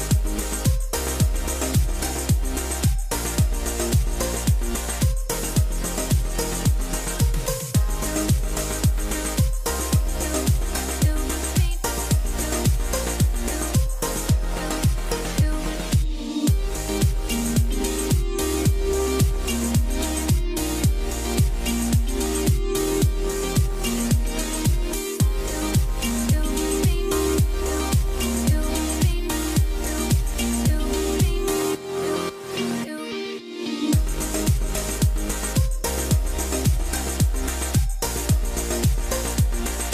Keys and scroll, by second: 3.4-5.2 typing, 10.8 KP_0, 10.9 Return, 11.2 Return, 11.6 Return, 12.0 Return, 19.5 KP_0, 19.6 Return, 31.3 KP_0, 31.5 Return, 33.5 F12, 34.9 KP_3, 35.3 Return, 37.2 F12, 39.2 Return, 39.6 Return.